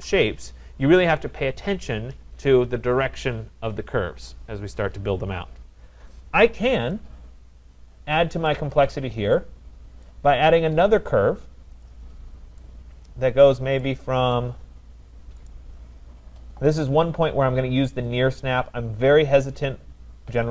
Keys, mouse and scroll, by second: 8.4 right click, 8.8-9.3 scroll, 10.0 right click, 10.3 middle click, 10.3 middle click, 10.5 middle click, 11.9 click, 13.4 right click, 14.3 right click, 14.8 scroll, 15.5 right click, 18.2 click.